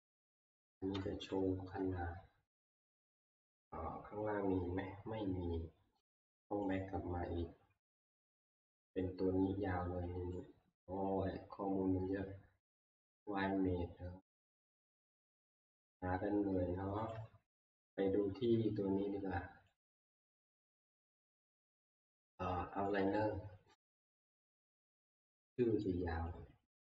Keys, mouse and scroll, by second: 0.6 shift+middle click, 0.7 middle click, 3.2 middle click, 3.2 middle click, 3.3 middle click, 3.6-4.0 scroll, 4.7 scroll down 8, 5.0 c, 6.7 click, 8.0 scroll, 8.8 scroll, 17.1 click, 19.8 click, 20.5 ctrl+scroll, 20.7 ctrl+q, 23.0 click, 26.3 click.